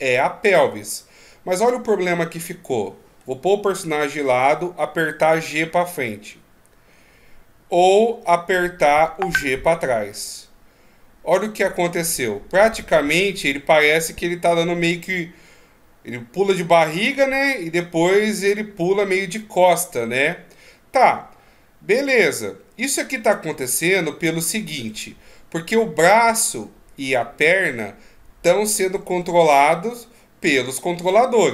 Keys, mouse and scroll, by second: 4.5 g.